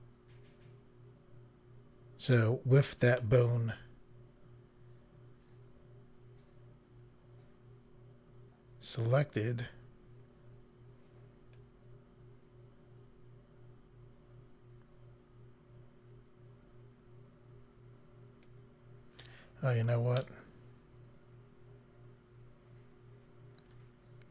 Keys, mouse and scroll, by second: 11.5 click, 20.2 middle click.